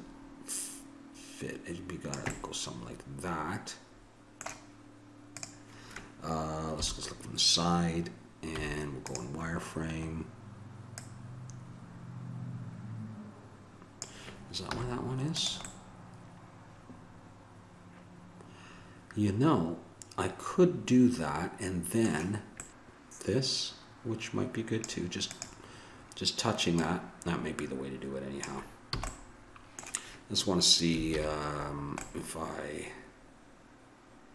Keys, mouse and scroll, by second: 2.3-3.5 middle drag, 5.4-6.8 drag, 6.8 KP_3, 8.5 z, 9.5 middle click, 11.0-13.0 drag, 14.7 z, 15.8 middle click, 16.0-17.5 middle drag, 22.7 click, 25.3-28.8 drag, 29.0 a, 29.1 middle click, 31.1 alt+h.